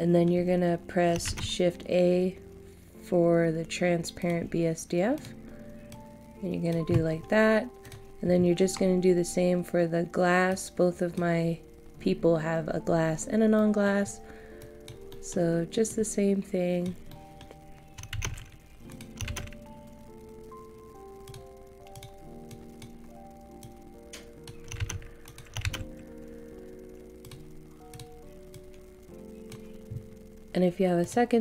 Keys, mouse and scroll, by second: 1.2 shift+a, 4.2-12.0 drag, 13.5 middle click, 14.0 scroll up 1, 14.6 click, 15.1 middle click, 15.9-17.1 drag, 17.1 middle click, 18.3 a, 18.9 click, 19.3 shift+a, 21.2 click, 25.2 click, 25.8 shift+a, 27.2-31.4 drag.